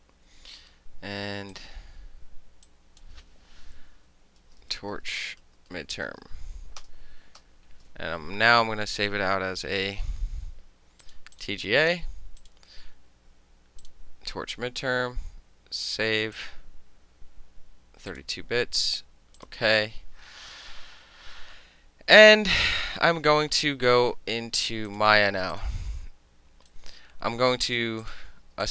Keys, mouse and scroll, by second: 1.6 click, 2.7 click, 3.1-4.2 middle drag, 4.3-7.0 typing, 7.5 Return, 9.7 shift+s, 11.1 click, 11.4 click, 12.5 click, 13.9 click, 16.4 click, 18.2 click, 19.5 click, 25.0 click, 25.6 click, 26.8-27.8 right drag, 27.8 middle click, 28.1 click, 28.2-28.7 middle drag.